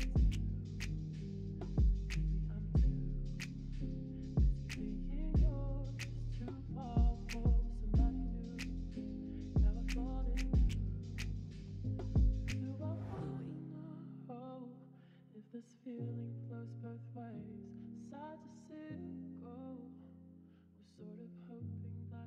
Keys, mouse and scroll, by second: 1.3 click, 2.3 click, 6.3 w, 9.1 shift+click, 9.9 shift+click, 12.8-13.8 e, 14.0 middle click, 17.8 middle click.